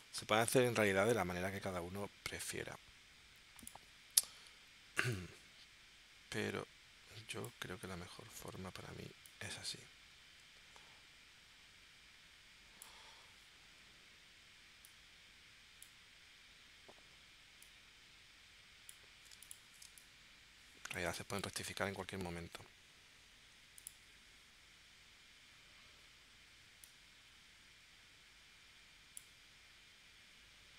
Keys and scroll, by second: 19.8 space.